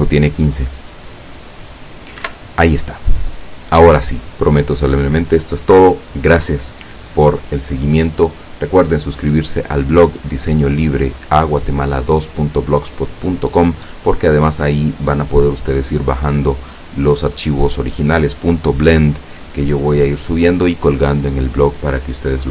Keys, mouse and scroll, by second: 2.2 Escape, 3.1-3.5 scroll down 2.